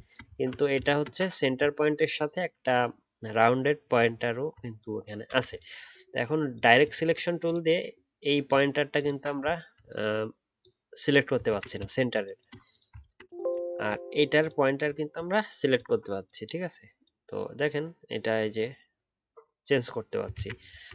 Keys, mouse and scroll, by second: 0.2 alt+scroll down 2, 0.3 alt+scroll up 1, 1.2-4.0 alt+scroll up 4, 4.0 alt+scroll up 1, 4.0-5.6 alt+scroll down 1, 9.5-10.8 alt+scroll up 1, 11.4-11.8 alt+scroll, 14.9 alt+scroll down 1, 20.3 ctrl+z, 20.8 alt+scroll down 1.